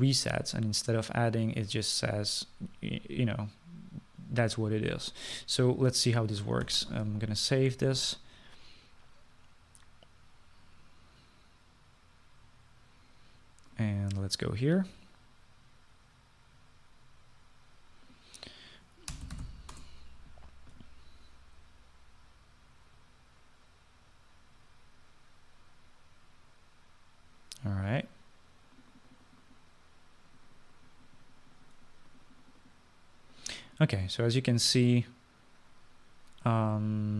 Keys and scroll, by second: 7.7 ctrl+s, 20.0-21.0 typing.